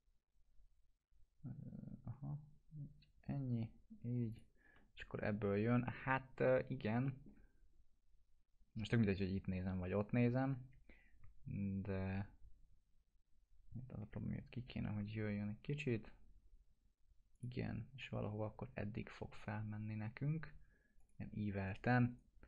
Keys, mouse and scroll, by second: 4.3 shift+click, 7.0 middle click, 7.3 scroll down 1, 10.6 scroll up 1, 14.0-15.8 scroll up 2, 17.3 click, 21.0 click, 21.7 right click.